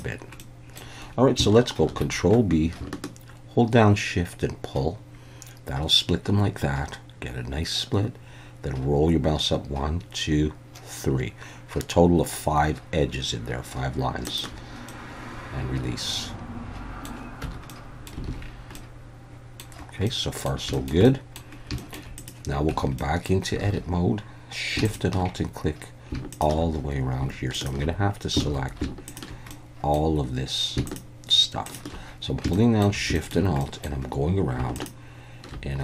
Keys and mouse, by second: 0.4 middle click, 1.8 ctrl+b, 14.2 shift+click, 14.9-17.1 middle drag, 17.4 Tab, 17.7-18.1 middle drag, 18.3 alt+a, 18.7-19.6 middle drag, 20.1-20.5 middle drag, 20.7 shift+middle click, 21.0 middle click, 21.8 shift+middle click, 22.2 click, 22.7 Tab, 23.0 middle click, 23.6 alt+a, 26.3 alt+shift+click, 28.4 ctrl+z, 29.5 middle click, 30.9 alt+shift+click, 31.6 alt+shift+click, 32.5 shift+middle click, 33.1 shift+middle click, 33.6 middle click.